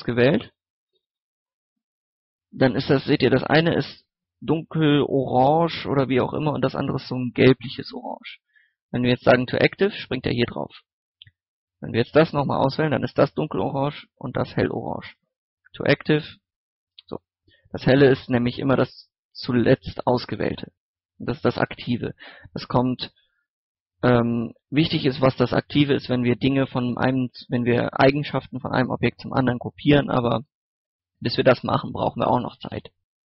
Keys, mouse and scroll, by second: 7.5 shift+a, 8.2 shift+s, 8.9 click, 11.4 shift+right click, 15.0 shift+s, 15.6-16.7 drag, 17.8 right click, 19.2 shift+right click, 20.5-24.2 middle drag, 24.7 right click, 25.1 middle click, 25.7 click, 26.7 middle click, 27.9 click, 28.5 middle click.